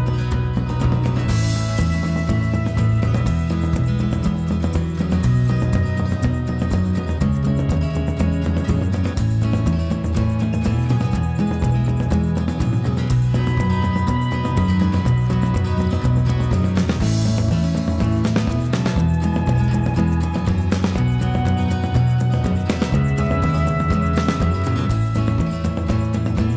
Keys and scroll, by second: 26.1-26.5 typing.